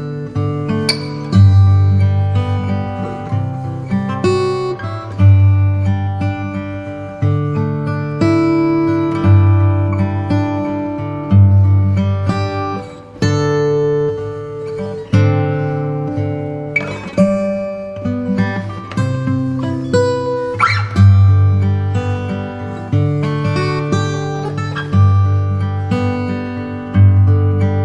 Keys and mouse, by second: 0.0 KP_1, 1.8 KP_0, 4.1 click, 5.7 click, 15.7 click, 17.4-18.9 drag, 22.5 click.